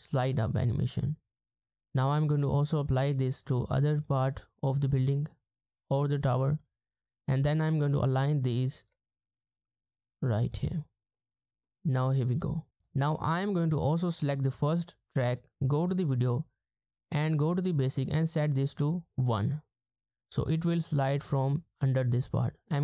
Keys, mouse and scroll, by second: 2.7 double click, 6.8 ctrl+scroll up 1, 8.4-8.9 ctrl+scroll up 2, 11.6 space, 12.6 space, 16.3-21.0 scroll down 1.